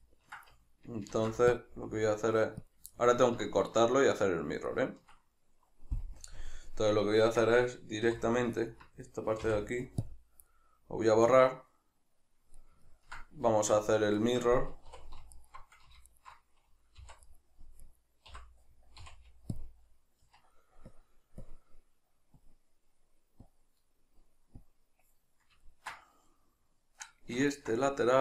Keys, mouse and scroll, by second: 1.1 ctrl+r, 2.7 click, 2.9-8.6 ctrl+middle drag, 6.2 KP_Decimal, 8.1 3, 8.6 alt+right click, 9.5 x, 10.5-15.4 middle drag, 13.5 alt+q, 14.9 2, 15.4 alt+right click, 16.1 alt+shift+right click, 17.1 v, 17.9 right click, 18.3 l, 20.9-25.6 drag, 25.6-27.8 ctrl+middle drag.